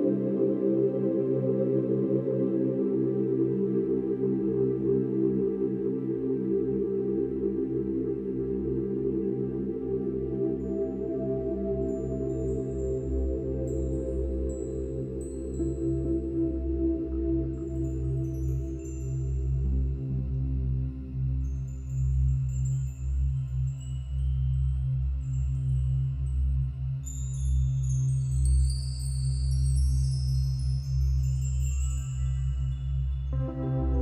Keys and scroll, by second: 25.6 ctrl+=, 25.7 ctrl+-, 26.2 ctrl+-.